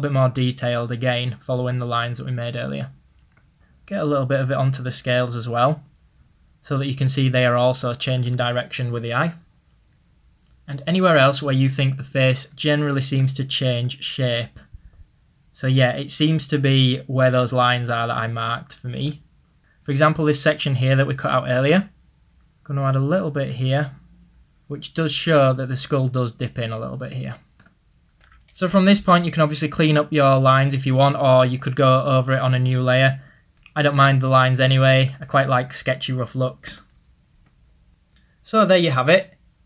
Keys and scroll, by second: 20.8 ctrl+z, 31.0 [.